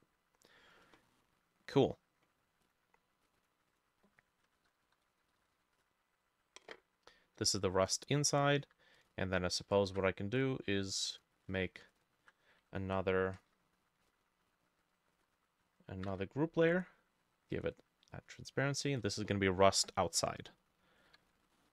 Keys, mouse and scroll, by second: 0.8-3.2 drag, 0.8 middle click, 3.4-7.8 drag, 4.4-6.1 typing, 4.5 shift+middle click, 8.6-11.5 drag, 8.6 w, 9.8 ctrl+middle click, 9.9 ctrl+shift+a, 13.4 ctrl+g, 14.1 ctrl+z, 15.2 Insert, 16.1 ctrl+g, 16.7 right click, 18.2 double click, 21.1 b, 21.6 ctrl+middle click.